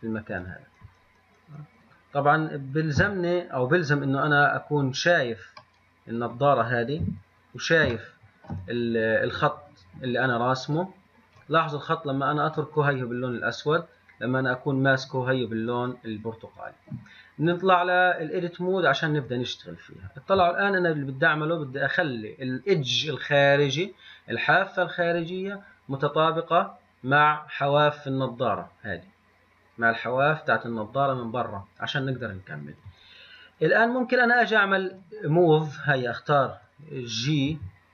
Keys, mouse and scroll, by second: 4.6-6.1 scroll up 2, 6.1-7.2 middle drag, 7.2 KP_1, 8.2-11.3 shift+middle drag, 14.1 click.